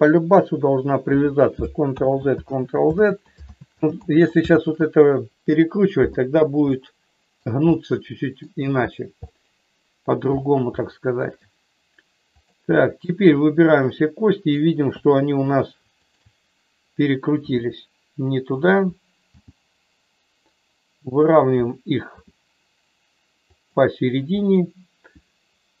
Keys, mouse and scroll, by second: 1.8 ctrl+z, 2.3 ctrl+z, 2.8 ctrl+z, 3.5 ctrl+z, 4.0 ctrl+z, 4.5 ctrl+z, 6.7 middle click, 7.7 middle click, 9.2 middle click, 10.8 shift+middle click, 12.3 click, 13.2-14.6 drag, 16.1 shift+click, 17.4 r, 19.2 g, 21.3 click, 22.1 r, 23.5 click.